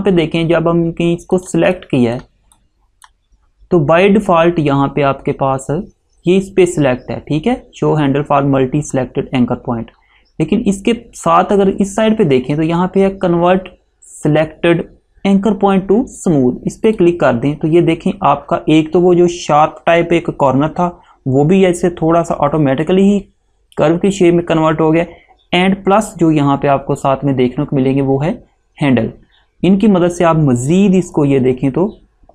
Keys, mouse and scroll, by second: 1.5 click, 17.0 click, 31.3 click.